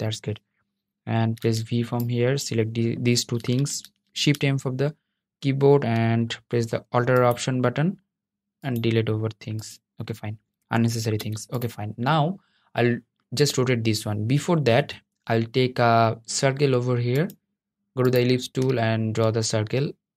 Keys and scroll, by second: 3.8 shift+m.